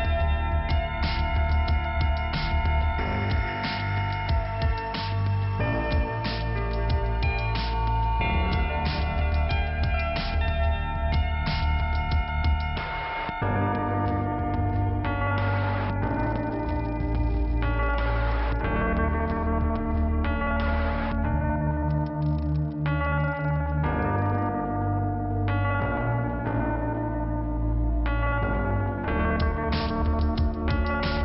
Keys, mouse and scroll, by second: 0.4 click, 1.1 click, 2.8 click, 3.8 click, 4.3 click, 4.4 click, 4.8 scroll down 2, 5.0 click, 5.9 right click, 6.3 scroll down 2, 9.5 click, 10.7 scroll down 1, 12.0 scroll down 1, 13.1 scroll up 1, 14.5 click, 15.5 scroll down 1, 16.3 click, 17.5 click, 24.4 click, 25.1 click, 25.9 click, 27.9 click, 30.9 scroll up 2.